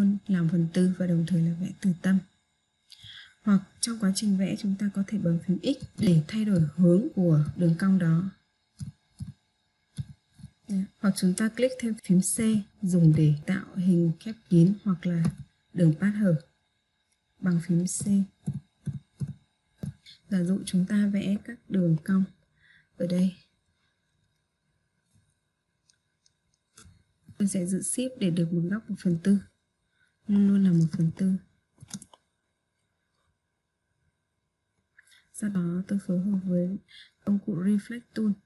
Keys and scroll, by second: 5.5 x, 12.3 c.